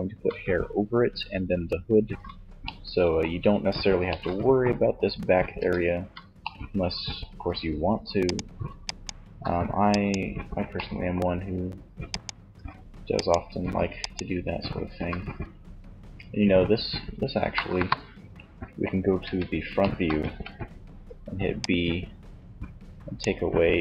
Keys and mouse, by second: 4.7 Tab, 16.8 KP_1, 18.4 z, 19.4 a, 20.2 b.